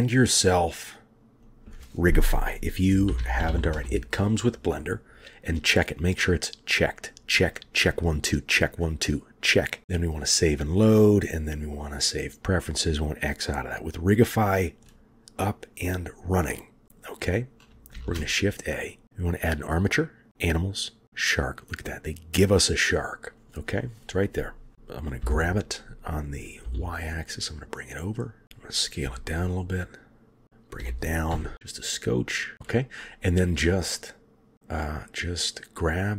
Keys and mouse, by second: 18.0 shift+a, 25.3 g, 29.1 s, 30.4 g, 30.8 g, 32.5 shift+click.